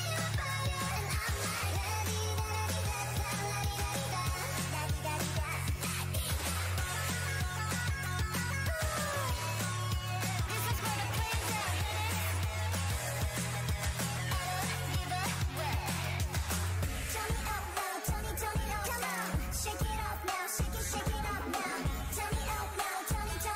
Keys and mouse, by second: 6.9-8.8 right drag, 7.6 click, 8.4-10.1 drag, 12.6-18.8 drag.